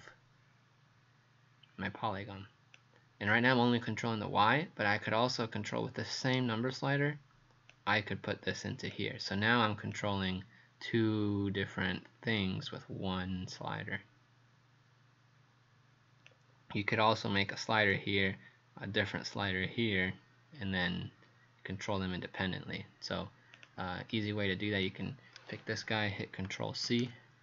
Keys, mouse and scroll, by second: 24.1 click, 26.9 ctrl+c.